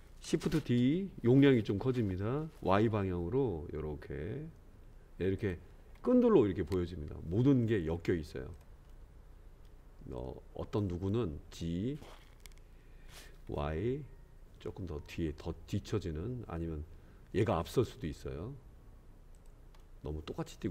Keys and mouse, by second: 0.7 shift+d, 8.9-9.6 middle drag, 10.2-10.8 drag, 11.5 g, 19.8-20.7 middle drag.